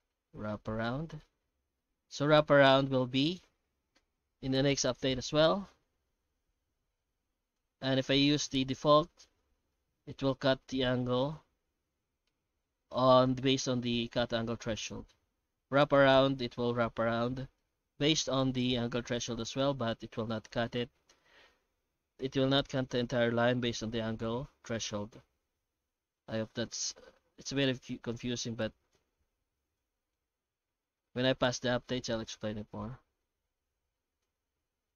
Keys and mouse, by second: 9.7 middle click, 12.2 F9, 16.9-17.6 middle drag, 18.0 F9, 22.8 middle click, 24.1 middle click, 25.1 F9.